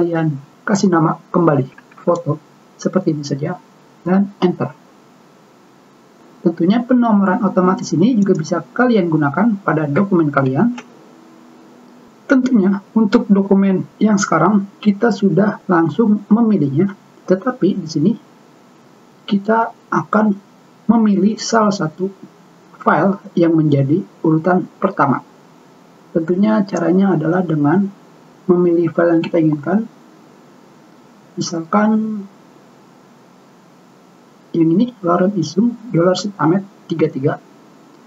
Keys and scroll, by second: 1.5-2.9 typing, 5.2 Return, 11.0 ctrl+v.